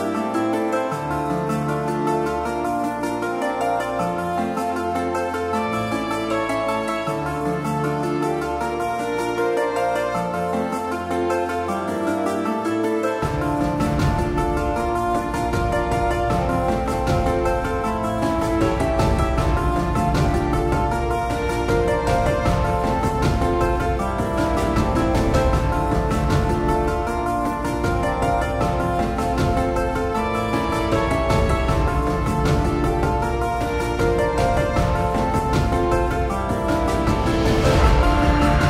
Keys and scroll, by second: 1.9-2.9 typing.